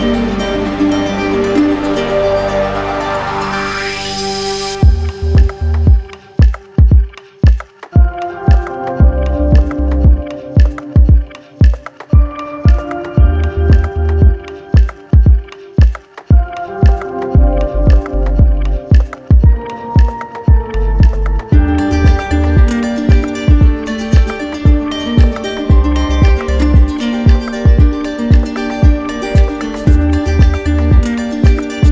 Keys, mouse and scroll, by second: 1.3 click, 2.6 right click, 4.2 click, 4.8 click, 5.2 shift+click, 5.4 shift+click, 6.5 ctrl+click, 7.2 w, 8.9-10.0 ctrl+drag, 15.2-16.3 drag, 16.6 click, 18.0 click, 19.1 z, 20.0 click, 21.4 click, 26.2 click, 27.3 click, 27.8 alt+click, 28.5 alt+click.